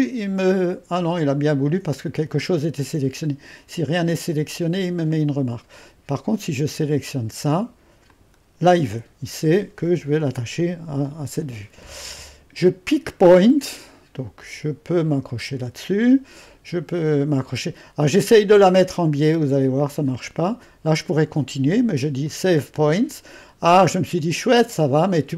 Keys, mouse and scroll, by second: 0.0-5.7 drag, 6.7-11.2 drag, 13.0-14.1 drag, 15.1-18.3 drag, 20.1-22.5 drag.